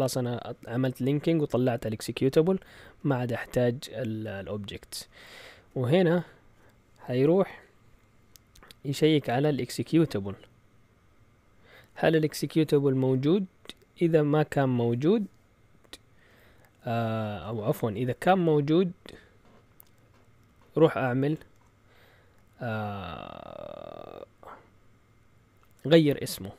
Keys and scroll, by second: 2.8 Down, 4.2-5.8 typing, 9.1 Right, 10.0 typing, 15.0 Down, 16.1 Up, 20.4 Down, 21.5 Tab.